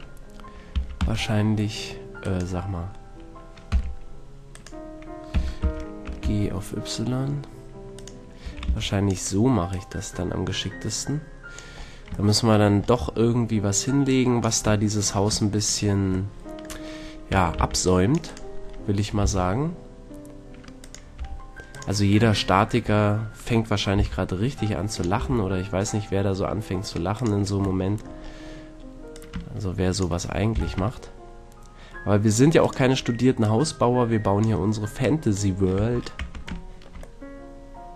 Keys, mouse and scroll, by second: 2.3-4.1 right drag, 3.7 g, 4.6-6.4 right drag, 5.3 g, 8.0-9.7 drag, 8.5 a, 8.6 c, 9.2 right click, 11.2 click, 11.7 click, 12.3-14.1 middle drag, 14.1 click, 14.8-16.6 middle drag, 17.3 a, 17.5 c, 18.3 middle click, 19.1 right click, 19.1 g, 20.9-22.8 drag, 21.1 r, 23.9 g, 25.0-26.8 drag, 25.1 r, 27.2-30.8 drag, 30.5 r, 32.7-36.7 drag, 35.7 a, 36.1 Tab, 36.7 middle drag, 36.9-37.6 drag.